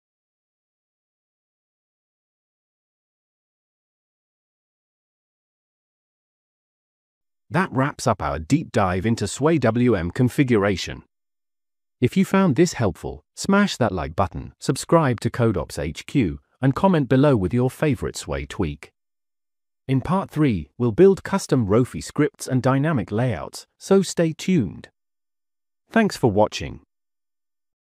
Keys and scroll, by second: 0.4 super+Return, 1.3 super+Return, 3.6 shift+super+q, 4.0 shift+super+q, 4.6 shift+super+q, 6.0 shift+super+q.